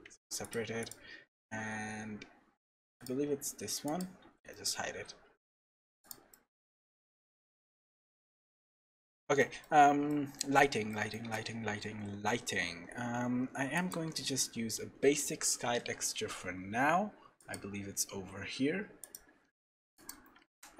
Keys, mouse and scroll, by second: 0.0 Tab, 0.4 click, 2.2-3.0 scroll down 2, 3.0 click, 3.0 scroll down 3, 3.9 click, 4.5 middle click, 6.0 click, 6.3 middle click, 9.1-9.4 scroll up 5, 9.4 middle click, 9.6-10.4 scroll down 5, 10.1 middle click, 10.9 shift+middle click, 13.7 click, 17.4 click, 19.5 middle click, 19.9 click, 20.4 shift+z.